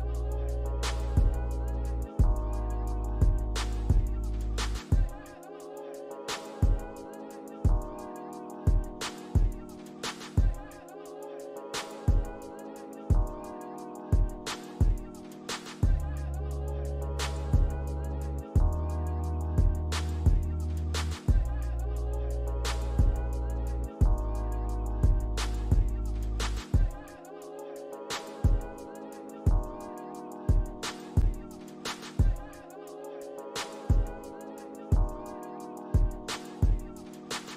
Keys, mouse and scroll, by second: 0.6 alt+middle click, 1.5 alt+middle click, 2.0 ctrl+click, 4.1 scroll down 2, 4.6 alt+middle click, 5.9 double click, 6.3 scroll up 1, 7.2 alt+middle click, 7.5 alt+scroll up 1, 8.3 right click, 10.4 double click, 11.0 alt+click, 12.6 ctrl+click, 14.3 ctrl+click, 15.5 ctrl+click, 16.8 ctrl+click, 17.6 alt+middle click, 18.8 alt+click, 19.1 alt+middle click, 19.5 alt+click, 22.2 ctrl+click, 23.5 ctrl+click, 24.9 ctrl+z, 25.3 ctrl+click, 26.6 ctrl+click, 28.2 alt+click, 29.6 double click, 29.9 scroll down 1, 30.3 alt+click, 31.5 alt+middle click, 32.5 alt+click, 33.3 alt+scroll up 1, 35.4 alt+middle click, 37.0 double click.